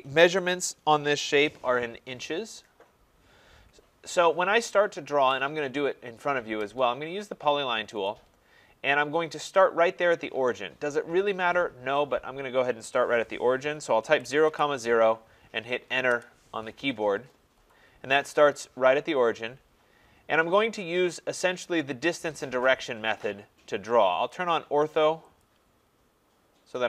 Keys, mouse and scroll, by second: 8.1 click, 14.2-14.5 typing, 16.1 Return, 20.5 Return, 25.5-26.8 drag.